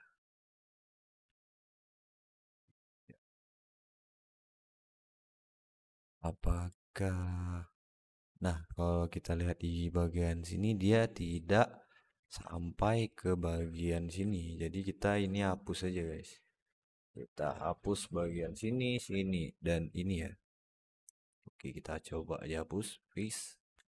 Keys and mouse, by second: 1.2 alt+middle click, 1.7 Tab, 2.0-4.0 alt+middle drag, 4.8-5.2 alt+middle drag, 11.3-11.8 alt+middle drag, 12.3 alt+shift+middle drag, 13.4 Tab, 14.1 alt+middle click, 15.2 alt+shift+middle click, 17.3 middle click, 18.8 shift+middle click, 20.6 middle click, 21.1 x, 23.1 alt+middle click, 23.7 Tab.